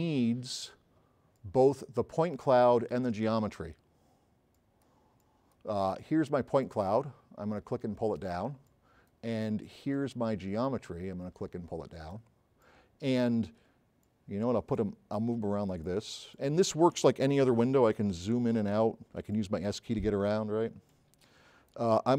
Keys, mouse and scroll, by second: 2.4 click, 4.6-5.0 drag, 10.7 click, 12.7-13.3 drag, 14.1-14.5 drag, 17.8 scroll up 2, 18.7 scroll up 2, 19.3 s.